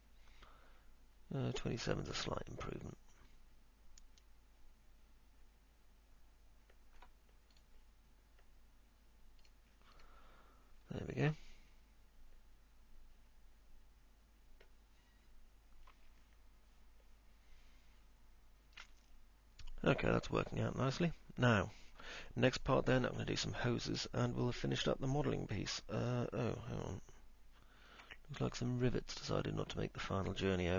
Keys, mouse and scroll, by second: 0.0-7.2 alt+middle drag, 11.2-22.0 alt+middle drag, 22.3 middle click, 23.0 alt+middle click, 27.0-28.0 alt+middle drag, 28.8 middle click, 29.3 alt+middle click.